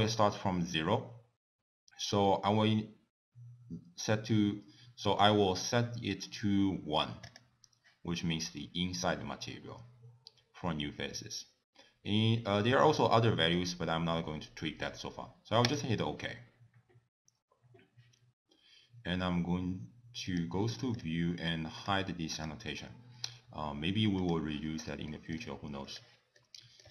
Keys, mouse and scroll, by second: 7.3 click, 20.4 click, 21.0 click, 21.8 click, 22.4 click, 24.3 click, 25.1 shift+middle click, 25.9 click, 26.4 middle click.